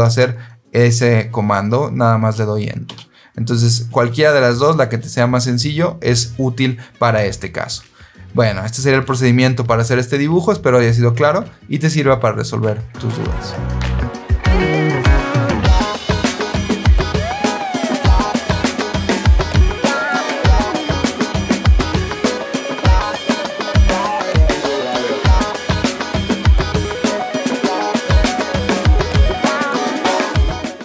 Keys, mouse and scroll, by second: 2.8 Escape, 20.9 click, 30.4 click.